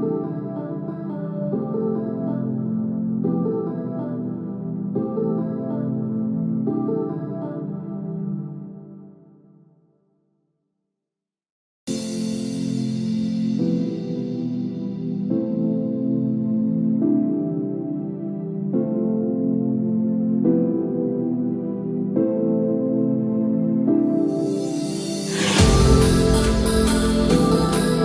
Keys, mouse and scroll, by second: 1.2 scroll down 1, 2.0 KP_7, 2.7-3.1 scroll down 4, 3.4-3.8 scroll down 4, 4.3 click, 4.9 shift+middle click, 5.2-5.6 scroll up 8, 5.9-6.6 scroll down 3, 6.6 shift+middle click, 7.0-7.4 scroll up 3, 12.0 click, 18.8 g.